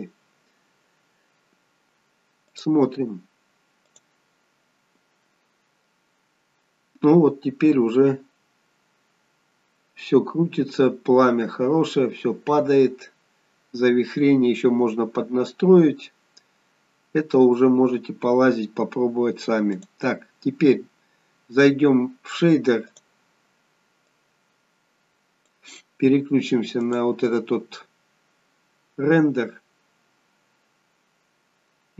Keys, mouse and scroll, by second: 2.4 click, 4.0 click, 20.2 click, 24.1 click, 29.4 click.